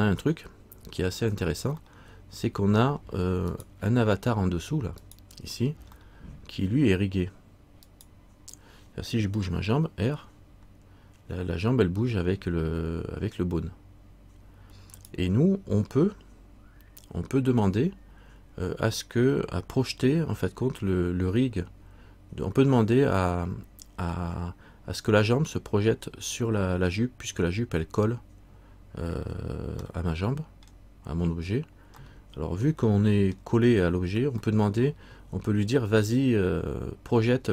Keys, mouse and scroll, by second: 2.0 middle click, 3.7 right click, 5.2 right click, 6.2 middle click, 8.1 right click, 9.7 r, 22.9-26.2 scroll up 1, 30.9 middle click, 32.2 middle click, 34.6 middle click.